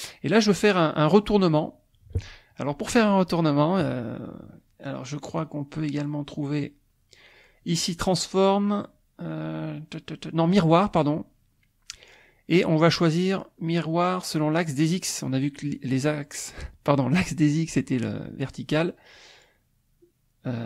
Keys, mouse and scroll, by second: 5.3 click.